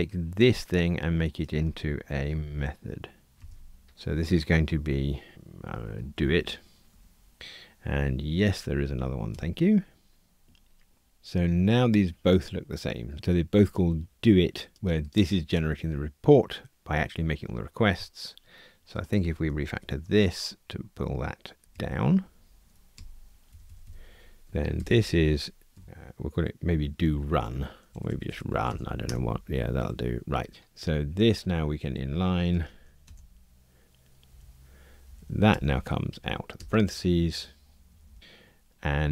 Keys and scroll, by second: 3.3 alt+super+m, 19.9 super+F6, 24.7 shift+F6, 32.5 alt+super+n, 35.5 alt+Return.